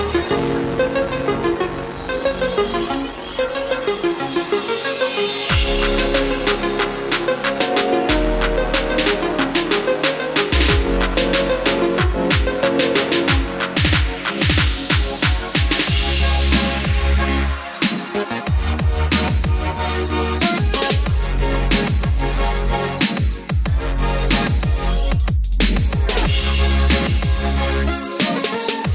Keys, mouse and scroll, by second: 1.1 space, 1.2 click, 1.7 scroll down 1, 2.8 F4, 4.7-9.2 drag, 23.1-23.9 scroll up 1, 25.1-26.4 drag, 26.5-28.9 drag.